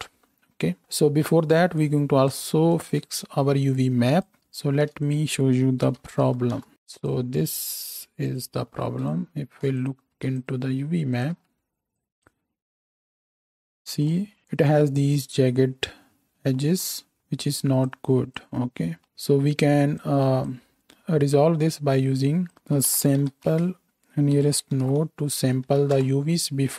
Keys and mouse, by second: 4.7 shift+a, 6.7 right click, 9.8-10.4 ctrl+right drag, 10.4 ctrl+shift+right click, 10.5-11.9 ctrl+shift+drag, 12.7 z.